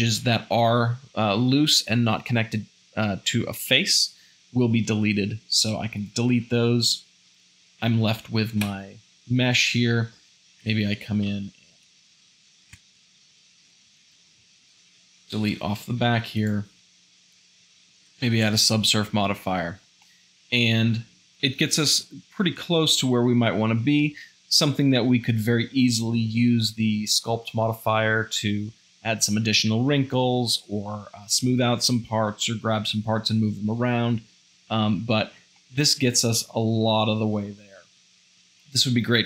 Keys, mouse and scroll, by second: 8.6 `, 9.8 Tab, 10.7 Tab, 11.3 shift+z, 11.7 drag, 11.9 1, 13.6 x, 13.8 v, 14.0 shift+z, 18.0 ctrl+2.